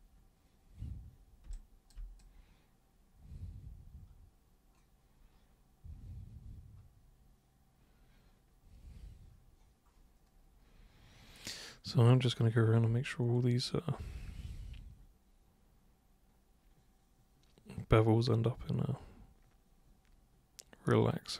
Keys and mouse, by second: 1.4 super+b, 1.5 click, 2.1-21.3 super+drag.